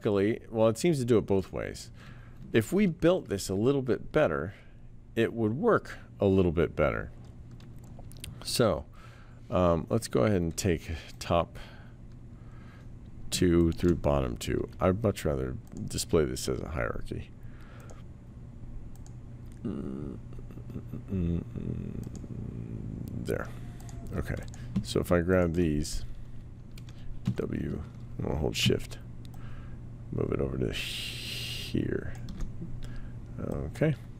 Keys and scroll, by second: 2.7 ctrl+z, 27.2 w.